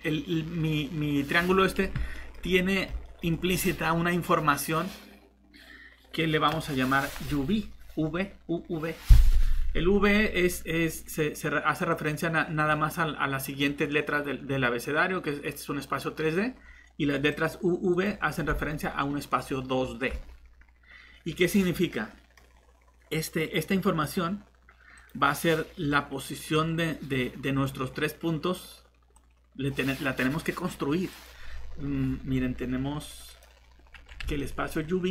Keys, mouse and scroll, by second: 2.4 scroll up 1, 2.5 middle click, 9.6-10.5 scroll down 1, 10.5-11.9 scroll up 1, 11.9 click, 21.9 middle click, 25.0 click, 25.9 middle click, 29.1 click, 34.3 middle click.